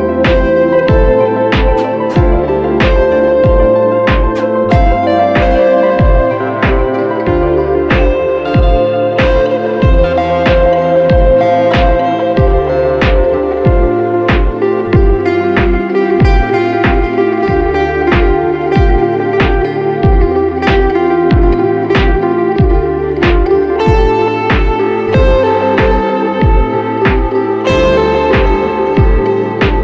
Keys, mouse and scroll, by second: 2.8 right click, 3.9 double click, 23.6 alt+click, 27.1 double click.